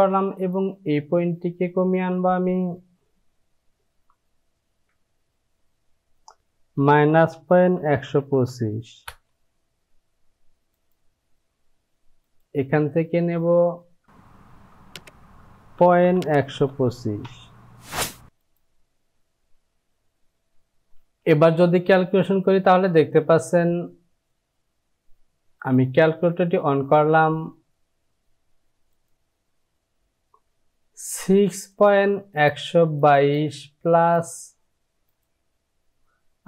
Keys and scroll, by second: 6.6 Down, 6.8 KP_Subtract, 7.4 KP_Decimal, 8.1 KP_1, 9.1 KP_2, 14.0 Down, 14.1 Down, 15.7 KP_Decimal, 16.1 KP_1, 16.4 KP_2, 17.3 KP_5, 21.5 j.